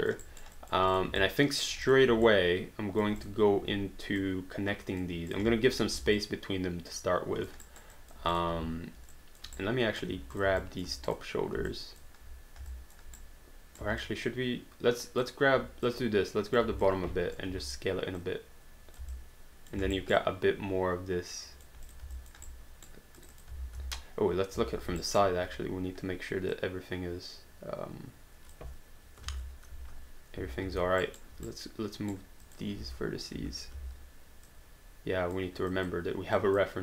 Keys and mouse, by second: 0.3 alt+right click, 0.6 alt+click, 0.9 click, 1.2 alt+click, 1.9 click, 2.5 alt+click, 3.2 click, 3.7 w, 4.2 click, 5.3 click, 6.2 alt+click, 7.8 alt+right click, 7.9 alt+click, 8.3 click, 9.1 alt+click, 9.6 right click, 10.1 q, 10.3 click, 10.6 alt+click, 11.1 shift+click, 11.8 alt+click, 12.7 alt+click, 13.2 right click, 14.0 alt+click, 15.9 click, 17.0 alt+click, 17.3 click, 17.5 r, 18.2 click, 19.1 alt+click, 19.8 alt+d, 19.9 alt+right click, 20.2 alt+click, 21.9 click, 22.2 alt+click, 22.5 right click, 23.2 click, 23.9 space, 25.0 alt+right click, 26.6 click, 29.3 ctrl+z, 29.8 space, 31.0 alt+right click, 31.5 right click, 32.4 click, 32.8 space, 33.8 w, 34.5 click, 35.7 click.